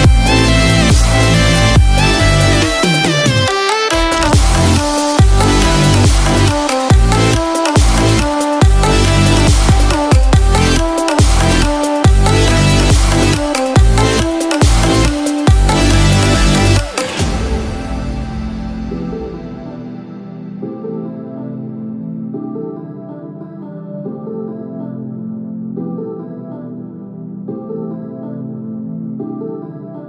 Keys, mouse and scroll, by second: 4.5 click, 21.6 scroll down 1, 23.1 scroll down 6, 24.0 click.